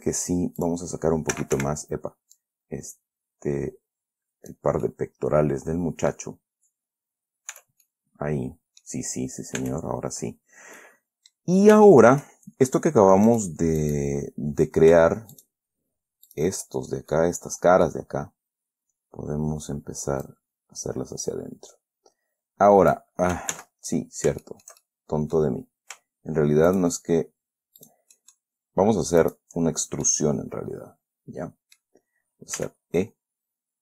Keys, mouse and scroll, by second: 0.2 shift+middle click, 0.9 shift+click, 1.9 Escape, 2.7-5.1 drag, 5.2 middle click, 5.2 scroll down 1, 6.8-7.1 scroll up 2, 7.9 Tab, 8.2-9.4 middle drag, 9.9 Tab, 11.1 middle click, 12.1 shift+scroll up 2, 12.1 shift+scroll down 2, 12.2 shift+middle click, 13.1 scroll up 2, 13.6 right click, 14.1 right click, 15.7 shift+right click, 16.6 shift+right click, 17.0-17.5 shift+scroll down 1, 17.5 right click, 20.6-23.5 drag, 23.9 ctrl+z, 24.3 ctrl+scroll up 1, 24.8-25.9 shift+middle drag, 26.0 scroll up 1, 27.0 shift+click, 27.1 shift+right click, 28.1 shift+right click, 28.5 shift+middle click, 29.6 shift+right click, 30.0-30.4 shift+scroll down 2, 30.4-32.1 middle drag, 32.1 click, 32.9 e.